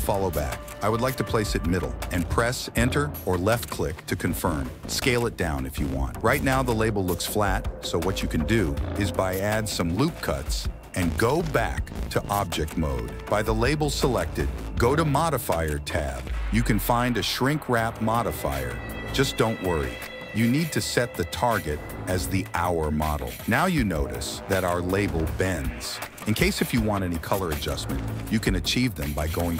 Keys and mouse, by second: 2.8 s, 6.7 Tab, 7.3 click, 8.0 ctrl+r, 9.5 click, 10.7 Tab, 12.0 g, 14.4 click, 18.4 click, 22.4 s, 23.8 g.